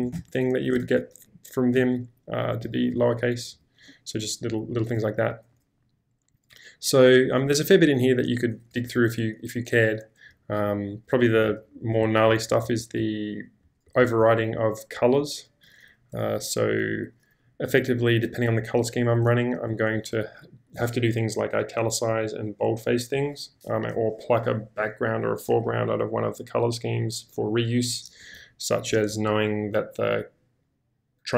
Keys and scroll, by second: 0.1 ctrl+l, 0.8 ctrl+j, 1.7-3.9 typing, 8.8 shift+g, 10.3-11.0 typing, 15.7 k.